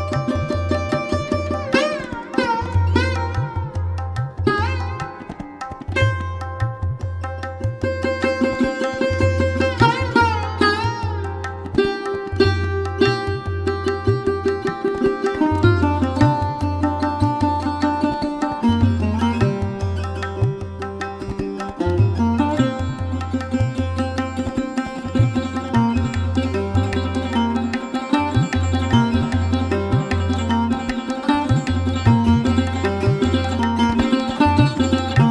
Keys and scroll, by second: 2.1 space, 3.2 space, 6.2 ctrl+z, 7.4 space, 8.2 space, 9.1 space, 9.8 space, 12.4 space, 15.9 space, 20.6 space, 22.2 ctrl+z, 26.9 ctrl+z, 30.8 space, 32.9 space, 33.6 space.